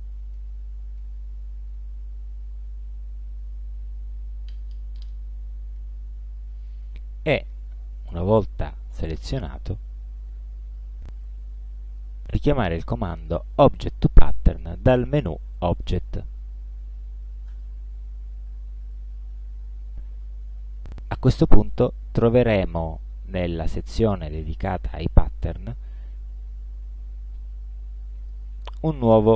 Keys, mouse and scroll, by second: 0.4 shift+click, 1.1 shift+click, 1.8 shift+click, 2.5 shift+click, 6.6 click, 10.7 click, 17.6 click, 21.1-21.4 ctrl+scroll down 2, 22.5 click, 23.5 click, 28.3 click.